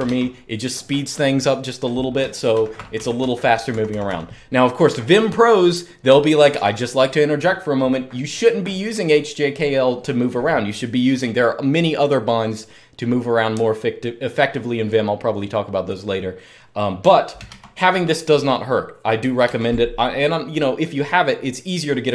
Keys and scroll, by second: 2.3 super+k, 2.5-4.3 typing, 17.2 super+2, 19.2 super+1.